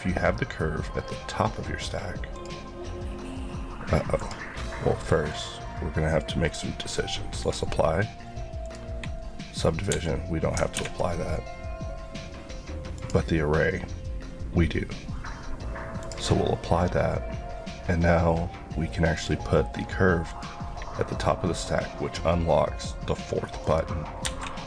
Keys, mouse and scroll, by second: 9.9 Escape, 13.0 click, 24.3 Escape.